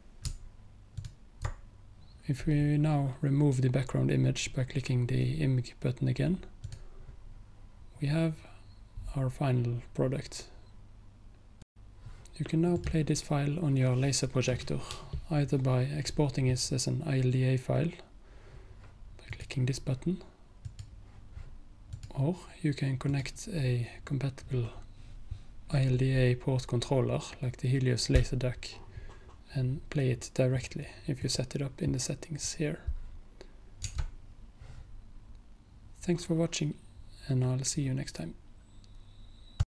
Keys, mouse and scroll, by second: 6.7 click, 11.7 click, 12.8 click, 19.4 click, 31.3-33.3 drag, 33.9 Tab.